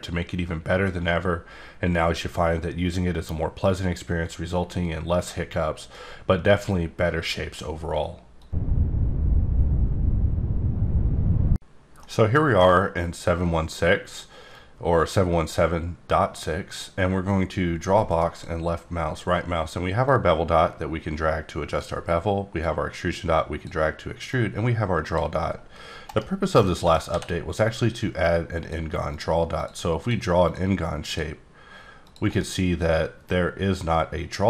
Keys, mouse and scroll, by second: 12.6-13.5 scroll up 1, 13.5-14.5 scroll up 2, 14.5-16.4 drag, 18.1 right click, 20.0 click, 22.6 click, 24.3 click, 26.1 right click, 26.6 middle click, 27.1 d, 27.6 click, 28.2 click, 29.5 click, 30.0 click, 30.4 click, 32.0 click, 32.3 right click.